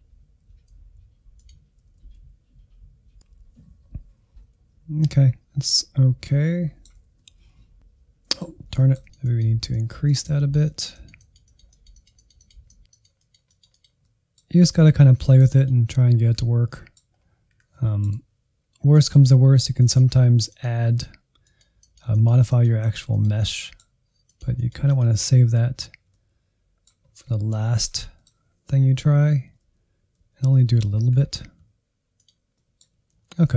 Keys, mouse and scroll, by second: 0.1 ctrl+click, 0.4 alt+z, 0.7 scroll up 1, 1.0 click, 1.6 Insert, 1.8 middle click, 2.1 Insert, 2.3 middle click, 2.6 scroll down 1, 2.7 middle click, 2.9 Insert, 3.0-5.4 middle drag, 5.4 Right, 5.5-6.3 Right, 6.4 middle click, 6.6 scroll up 1, 6.8-9.1 middle drag, 9.1 scroll up 1, 9.2 Insert, 9.5 middle click, 9.7 scroll up 1, 9.8 middle click, 10.5-13.9 drag, 13.9 scroll down 1, 14.2 click, 14.4 scroll up 1, 14.7 Insert, 14.9 Insert, 15.1 click, 15.6 Insert, 15.7 middle click, 16.2-16.8 scroll up 2, 16.5 middle click, 16.8 Insert, 16.9 shift+middle click, 17.4-18.8 drag, 18.8 middle click, 19.1 click, 19.4 middle click, 19.6 click, 19.9 Insert, 20.0 scroll down 1, 20.1 middle click, 20.4 scroll up 2, 20.5 Insert, 20.7 shift+middle click, 21.0 scroll up 1, 21.2-22.2 drag, 22.5-23.6 drag, 23.6 middle click, 23.9 click, 24.5 Insert, 24.6 scroll down 1, 24.8 middle click, 25.3 scroll down 1, 25.4 middle click, 25.9 scroll down 1, 26.1 middle click, 26.4 Right, 26.9 Left, 27.2 Insert, 28.4 scroll up 1, 28.7 click, 29.6 Insert, 29.7-30.1 scroll down 3, 30.1 middle click, 30.3 Right, 30.7 middle click, 31.1 Right, 31.2 Right, 31.3 Right, 31.4 middle click, 32.1-32.4 Right, 32.5 middle click, 32.9-33.2 scroll down 1, 33.2 Left, 33.4-33.5 Left.